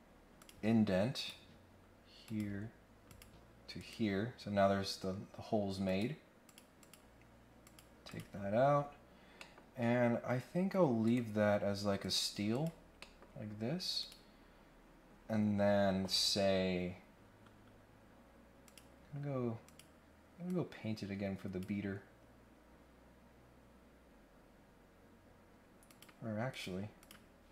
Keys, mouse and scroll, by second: 0.3 click, 1.1 click, 2.2 click, 3.1 click, 3.8 right click, 5.8 click, 6.4 click, 6.8 click, 7.6 click, 8.1 click, 8.4-8.9 scroll down 2, 9.3 middle click, 11.0 right click, 12.0 click, 12.5 click, 12.9 middle click, 14.0 click, 18.6 click, 19.6 click, 20.4-21.6 drag, 25.8 click, 26.5 click, 27.0 click.